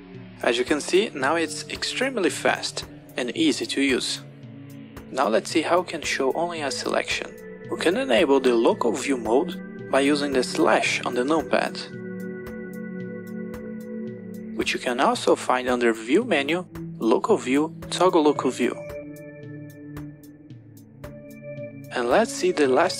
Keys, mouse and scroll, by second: 0.5 click, 1.2-4.2 typing, 12.1 KP_Divide, 13.1 KP_Divide, 15.5 click, 19.3 click, 21.3 KP_Divide.